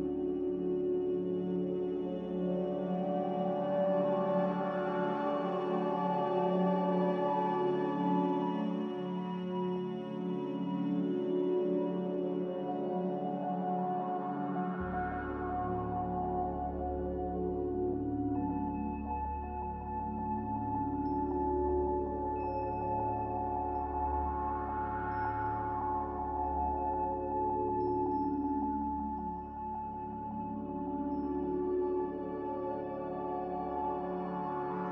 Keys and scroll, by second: 21.0 ctrl+k, 24.2 z, 27.4 ctrl+c.